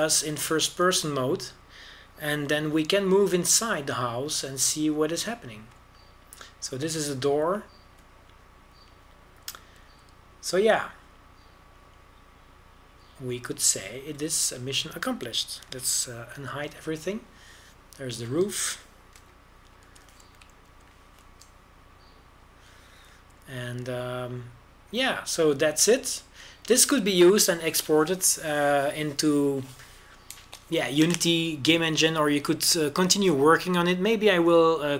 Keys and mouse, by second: 18.5 alt+h, 21.3 KP_0, 22.3 shift+f.